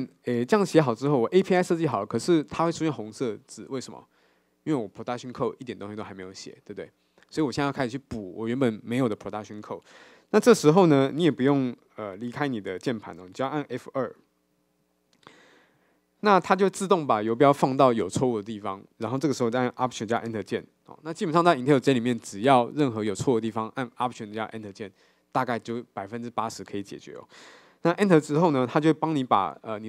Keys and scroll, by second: 15.9 F2.